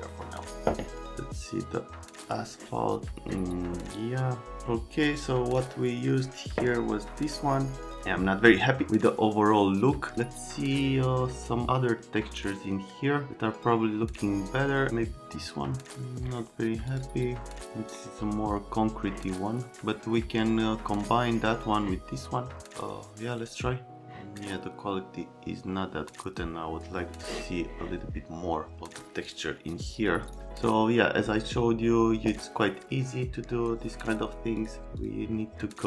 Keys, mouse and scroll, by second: 2.2 click, 4.5 click, 22.8 middle click, 24.0 middle click, 29.2 middle click, 30.1 click, 34.5 click, 35.0 click.